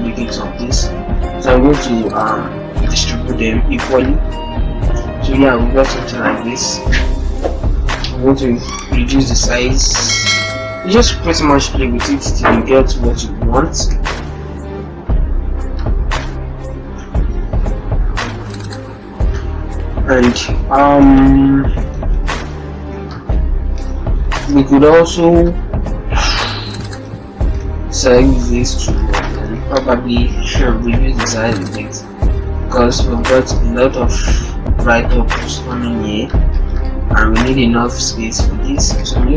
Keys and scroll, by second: 6.6 ctrl+t, 9.6 shift+Left, 9.8 shift+Left, 10.0 shift+Left, 10.2 shift+Left, 10.3 shift+Left, 14.0 ctrl+t, 21.3 ctrl+alt+-, 21.4 ctrl+alt+0, 23.6 ctrl+-, 29.1 ctrl+shift+Left, 29.7 ctrl+shift+Left, 29.9 ctrl+shift+z, 39.0 ctrl+shift+t.